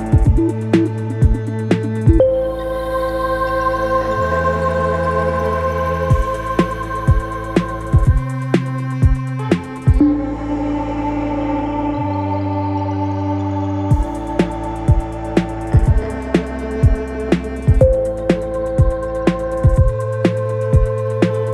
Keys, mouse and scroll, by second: 10.0 ctrl+d, 16.7 double click.